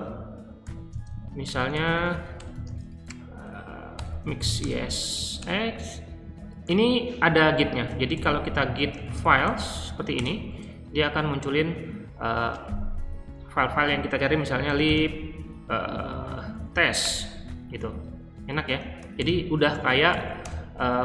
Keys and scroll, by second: 0.6-5.8 typing, 7.8-9.6 typing, 10.1 Return, 14.4-17.0 typing, 18.8-20.3 typing.